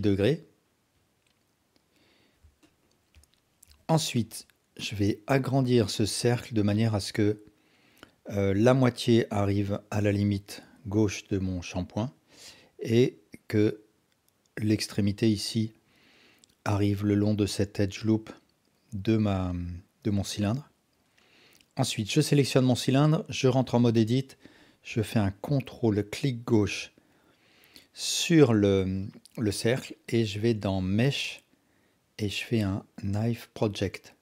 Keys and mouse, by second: 1.2-2.3 drag, 2.7-3.1 alt+drag, 3.6 KP_1, 4.4-5.3 drag, 5.6 s, 8.1 click, 10.9 click, 23.4 Tab, 30.9-34.2 drag.